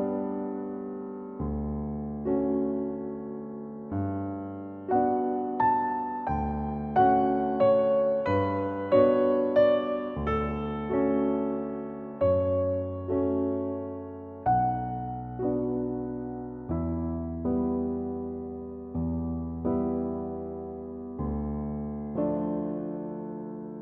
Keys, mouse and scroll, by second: 0.6-2.3 middle drag, 2.3 s, 6.0-7.1 drag, 7.1-8.3 middle drag, 8.3 scroll down 1, 9.8-11.8 shift+middle drag, 11.8 shift+d, 12.1 g, 12.4 shift+middle click, 12.8-14.0 drag, 14.3 click, 15.1 middle click, 15.8 scroll down 5, 15.9 scroll up 10, 16.2 click, 16.5 scroll down 1, 16.6-17.7 shift+middle drag, 17.7-18.3 drag, 18.8 KP_1, 18.9 scroll down 2, 19.1 b, 20.0 click, 20.5 r, 21.0 shift+d, 21.2 g, 23.6 s.